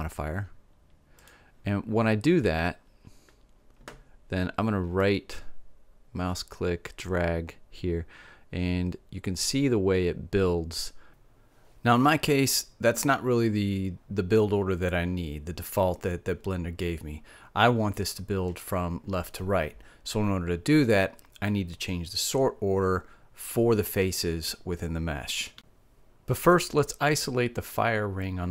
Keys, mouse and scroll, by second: 5.2-7.1 drag, 27.6-28.5 middle drag.